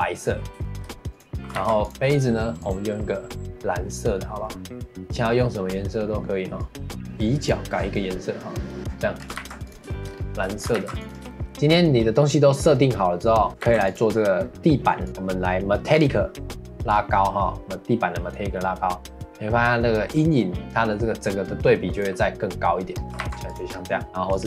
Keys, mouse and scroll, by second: 0.6-1.1 shift+middle drag, 1.1 click, 1.6 ctrl+s, 2.6-3.4 drag, 7.4 click, 9.2 scroll down 2, 9.4 ctrl+s, 9.9 shift+middle click, 10.2 scroll up 1, 10.5 shift+middle click, 10.8 ctrl+s, 11.3 shift+middle click, 11.5 Tab, 11.5 scroll down 4, 13.5 shift+middle click, 13.6 ctrl+s, 15.0 click, 15.9-16.9 scroll down 2, 16.9-19.9 drag, 21.9 click, 22.9 scroll up 1, 23.2 ctrl+s, 23.7-24.3 scroll up 1, 24.3-24.4 drag.